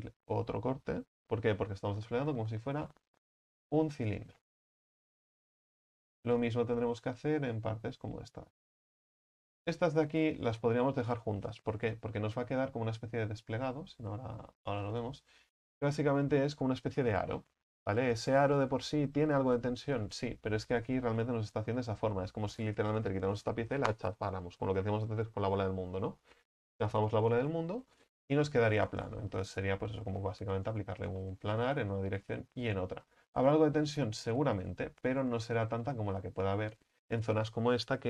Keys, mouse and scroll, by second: 0.0 ctrl+right click, 3.3 u, 3.9-6.8 middle drag, 6.8-7.4 scroll up 4, 7.4 right click, 7.9-8.5 scroll down 3, 8.5-14.8 middle drag, 14.8 u, 29.6 right click, 30.7 right click, 31.2-32.4 middle drag, 32.4-33.1 scroll down 3, 33.1-34.3 scroll up 5, 34.3-34.7 scroll up 1, 34.7-36.5 scroll down 7, 36.5 right click.